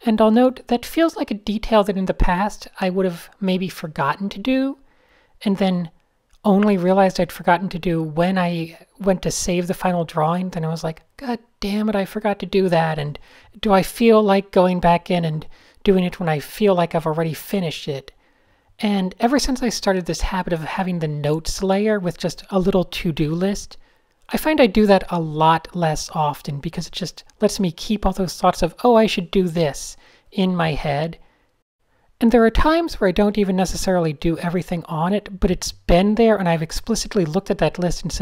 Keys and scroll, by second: 0.6-1.5 typing, 2.8 super+space, 5.1 n, 5.2 Tab, 9.6 d, 10.7-12.2 typing, 13.3 super+z, 14.6 super+z, 15.0-16.1 typing, 17.7 n, 19.1-21.8 typing, 25.3 super+z, 28.3-29.3 typing, 35.0 d, 35.2 super+a, 35.3 super+a, 36.3-36.8 typing, 37.6 shift+super+a, 37.7 super+1.